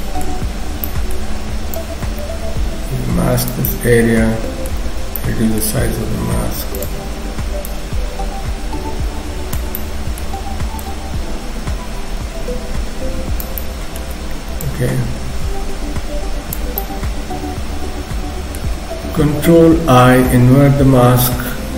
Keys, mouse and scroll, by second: 0.4-0.9 scroll up 3, 0.9 middle click, 1.7 click, 3.7 middle click, 4.8 ctrl+z, 5.2 middle click, 6.0 f, 7.7 click, 9.8 middle click, 10.8 click, 13.6 middle click, 14.6 click, 16.8 middle click, 19.9 ctrl+i, 20.2-20.5 scroll down 3, 21.3-21.7 scroll down 1, 21.3 KP_1.